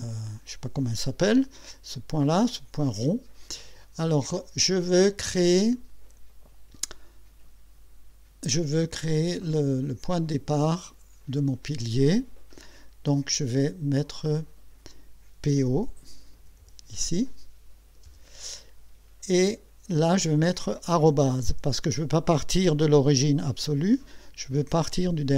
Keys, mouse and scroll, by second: 0.0 scroll up 2, 1.9-3.4 right drag, 3.8 right click, 13.9 click, 16.2-17.1 typing, 18.1 Return.